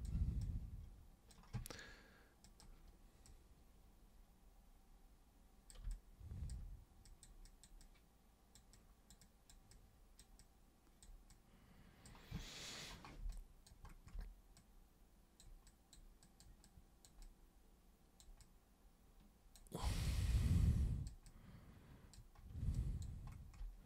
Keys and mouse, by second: 0.4 super+click, 2.5 super+click, 3.3-5.7 super+drag, 5.9 alt+super+click, 7.1 super+click, 7.4 super+click, 7.8 super+click, 8.7 super+click, 9.2 super+click, 9.7 super+click, 10.4 super+click, 11.3 super+click, 13.3 alt+super+click, 14.6 super+click, 15.7 super+click, 16.2 super+click, 16.7 super+click, 17.2-18.2 super+drag, 18.4-19.5 super+drag, 19.9 super+click, 20.3 super+click, 21.2 super+click, 22.8 alt+super+click.